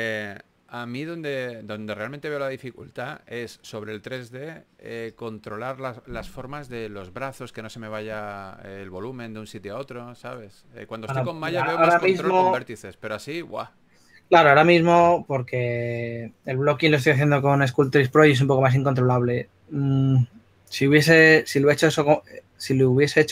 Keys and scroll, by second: 8.7-9.8 typing, 15.3 2.